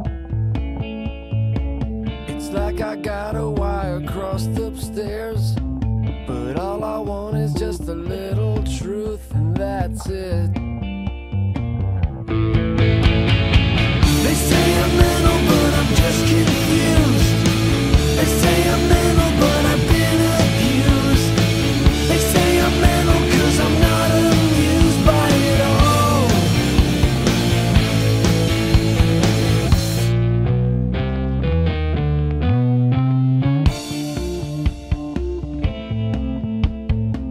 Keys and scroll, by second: 4.4 scroll, 15.4 alt+scroll, 22.1 alt+scroll, 23.3 alt+scroll, 32.5-33.9 typing, 36.0-37.3 typing.